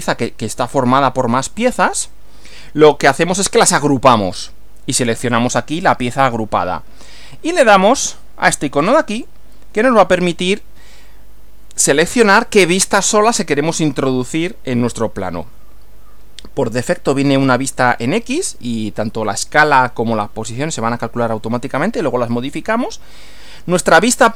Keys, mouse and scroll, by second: 9.2 click.